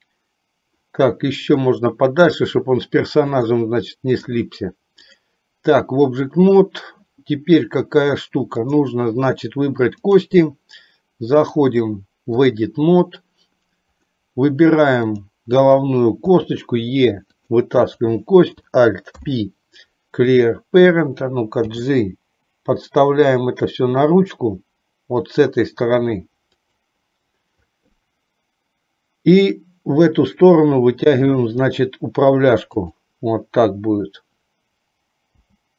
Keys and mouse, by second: 1.6 click, 3.5 click, 8.6 click, 10.2 click, 11.6-12.7 drag, 15.3 click, 16.4 e, 17.9 click, 19.2 alt+p, 21.8 g, 29.5 click, 31.1 e, 35.5 g.